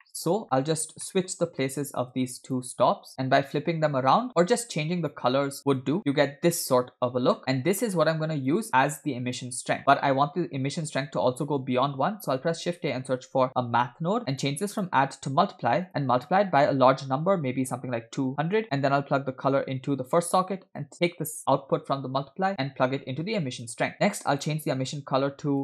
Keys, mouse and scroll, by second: 0.1 middle click, 0.3-1.1 scroll up 7, 0.4 middle click, 1.1 middle click, 1.8-2.6 drag, 3.1 click, 5.8 click, 6.0 scroll down 4, 8.1 scroll down 3, 8.1-8.5 drag, 9.0 click, 9.8 scroll down 1, 10.0-11.1 middle drag, 12.2 shift+a, 14.8-15.9 drag, 16.2-18.6 drag, 17.7 0, 17.9 0, 19.9-20.9 drag, 21.8-23.8 drag, 23.9 middle click, 24.3 click.